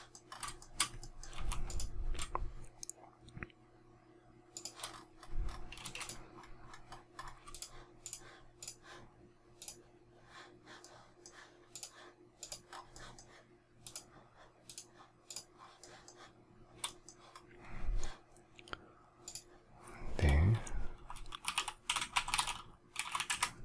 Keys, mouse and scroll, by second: 0.5 shift+middle click, 1.2 m, 4.5 shift+click, 5.0 shift+scroll up 1, 5.7 space, 7.4 shift+click, 8.5 shift+click, 9.5 shift+click, 10.7 shift+middle click, 11.6 shift+click, 12.3 shift+click, 12.6 shift+scroll, 12.8 shift+middle click, 13.7 shift+click, 14.6 shift+click, 15.2 shift+click, 15.5 shift+scroll, 15.7 shift+middle click, 21.2-23.6 typing.